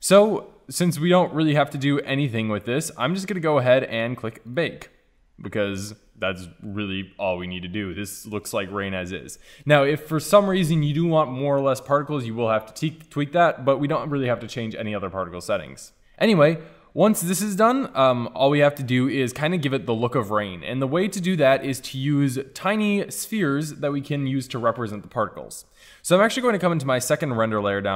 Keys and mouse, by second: 4.6-6.0 drag, 6.0 middle click, 6.8-8.1 middle drag, 16.3-16.6 drag.